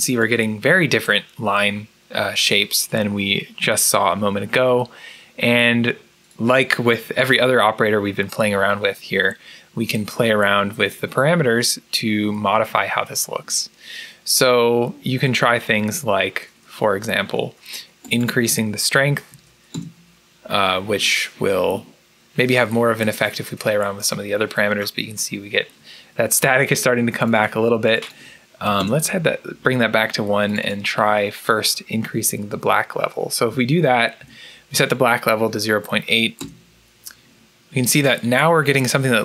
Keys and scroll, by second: 19.2 5, 19.6-25.6 Return, 28.6 Return, 31.8 0, 33.8-34.6 typing, 36.3 Return.